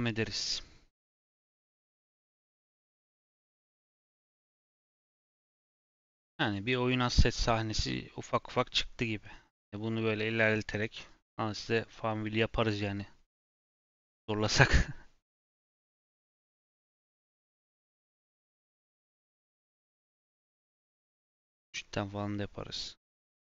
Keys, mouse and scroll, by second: 5.2-5.8 scroll down 2, 5.9 click, 6.1-6.5 scroll up 2, 6.5-12.2 middle drag.